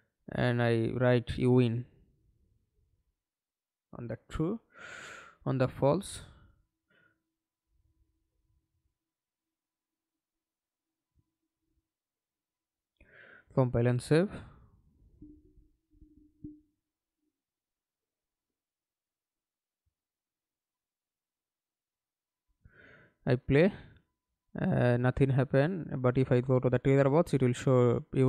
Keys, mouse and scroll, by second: 0.9 right click, 4.4-5.9 typing, 11.1 alt+click, 14.0 right click, 20.0 F11, 20.5 alt+p, 21.9-27.2 typing.